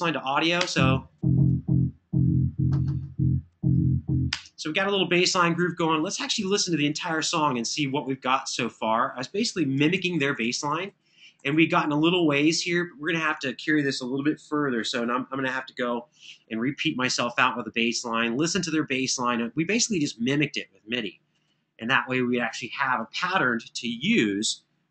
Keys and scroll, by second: 0.3 space, 9.7 super+[, 9.9 super+[, 11.1 super+].